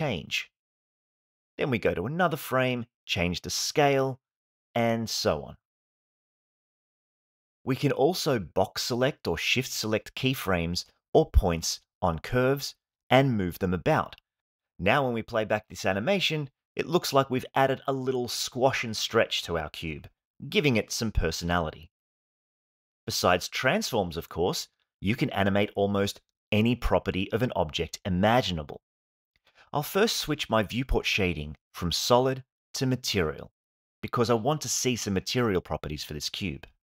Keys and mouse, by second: 0.2 s, 0.3 z, 1.6-4.7 typing, 3.7 click, 5.6 alt+s, 6.0 space, 7.3-8.4 drag, 9.5 g, 12.8 space, 20.1 space, 20.9 click, 21.8 click, 22.1 x, 23.2 click, 24.0 g, 25.4 space.